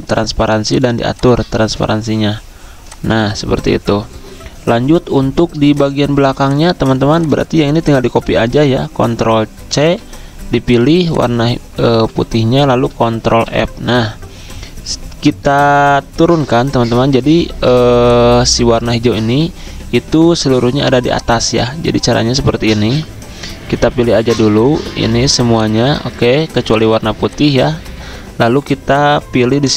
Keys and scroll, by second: 9.8 ctrl+c, 13.3 ctrl+z, 13.3 ctrl+f, 20.5 ctrl+z, 22.0 ctrl+z, 26.2 ctrl+z, 27.9 ctrl+z.